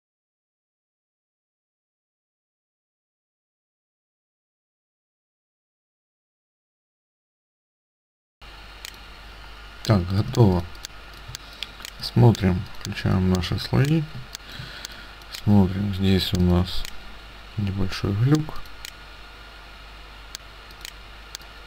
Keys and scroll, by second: 0.7 space, 1.0 t, 1.6 ctrl+c, 2.0 Tab, 2.0 Tab, 2.4 Tab, 2.6 Tab, 2.8 ctrl+v, 3.1 Tab, 3.3 Tab, 3.7 ctrl+v, 4.9 ctrl+v, 5.6 ctrl+space, 10.3 ctrl+space, 14.3 space.